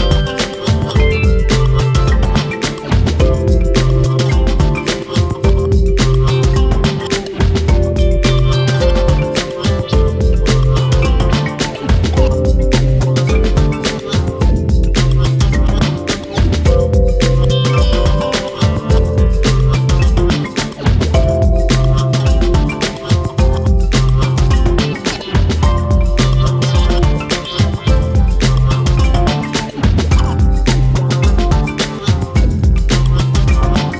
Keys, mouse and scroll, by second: 1.5 click, 1.8 click, 3.0-4.4 drag, 7.3 click, 7.6 click, 10.7-12.0 drag, 15.3 click, 15.4 scroll down 1, 15.6-16.1 middle drag, 16.1 scroll up 2, 16.2-16.6 shift+middle drag, 16.6 click, 16.7-17.0 shift+middle drag, 17.0-17.5 scroll up 1, 17.5 Tab, 18.1 KP_3, 18.4 KP_1, 18.6 scroll up 2, 18.9 shift+middle click, 19.2 shift+middle click, 19.7 ctrl+r, 20.7 ctrl+r, 21.5 g, 22.5 ctrl+r, 23.5 ctrl+r, 25.9 g, 26.5 Left, 26.6 Left, 26.9 g, 27.5 click, 27.6 click, 27.9 g, 28.5 click, 28.9 g, 29.5 click, 29.7 g, 31.1 click, 31.2 click, 31.3 g, 33.0 scroll down 2, 33.2 shift+middle click, 33.4-33.9 scroll up 1.